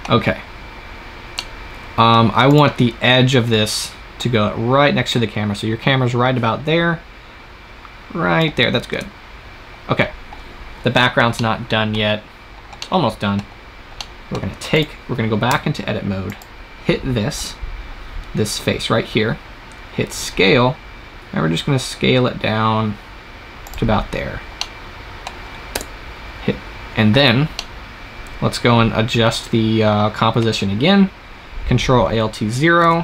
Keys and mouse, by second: 2.4-7.9 right drag, 8.8 KP_0, 14.6 right click, 15.4 Tab, 15.4 click, 16.1-18.6 right drag, 20.0 s, 23.6-25.6 drag, 25.6 KP_0, 32.7 ctrl+alt+KP_0.